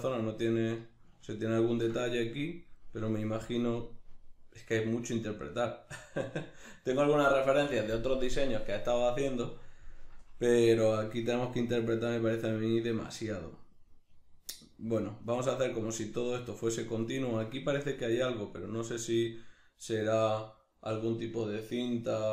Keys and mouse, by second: 11.1 middle click.